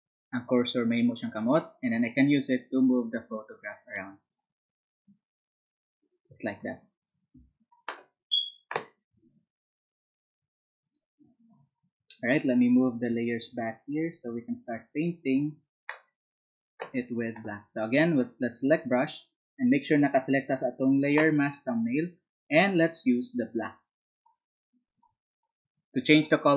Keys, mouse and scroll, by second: 10.2 space.